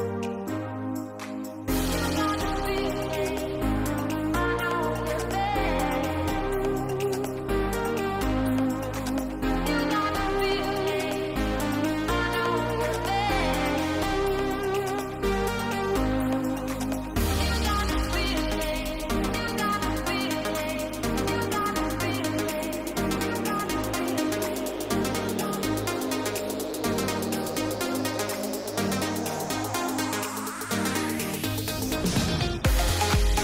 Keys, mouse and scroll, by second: 2.6 shift+middle click, 3.3 g, 5.5 shift+middle click, 6.6 r, 12.5 g, 14.2 s, 17.5 shift+middle click, 18.0 click, 19.0 s, 20.7 click, 21.7 s, 23.9 click, 24.7 s, 26.5 click, 29.0 s, 31.7 click, 32.7 click.